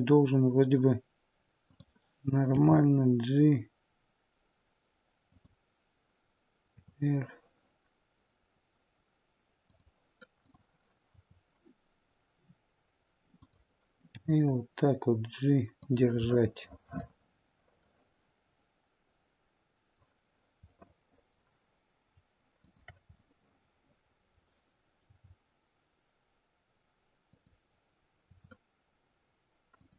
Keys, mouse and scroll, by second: 2.5 g, 6.6 r, 10.4 click, 11.0 r, 14.1 g, 16.3 middle click, 20.6 middle click, 22.5 shift+click, 23.1 middle click, 25.0 g, 28.1 r.